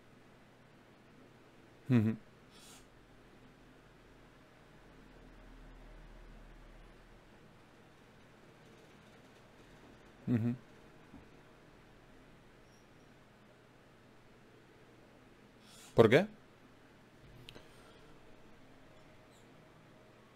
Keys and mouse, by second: 5.7 Tab, 8.6 Tab, 12.0 right click, 16.0 ctrl+Tab, 17.0-20.0 right drag, 19.3 shift+q.